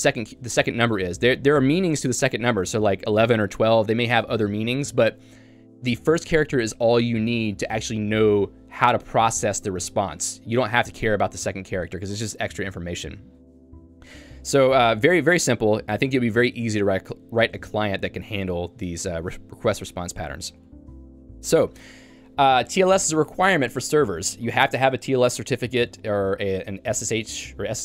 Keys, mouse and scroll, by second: 0.0-0.6 typing, 15.7 j, 22.6 k.